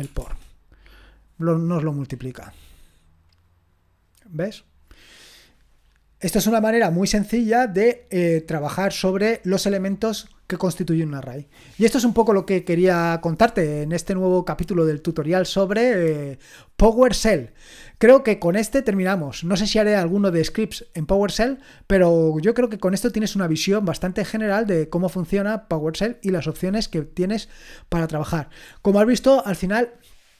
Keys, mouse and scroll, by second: 0.2 Return, 6.2-30.3 scroll up 2.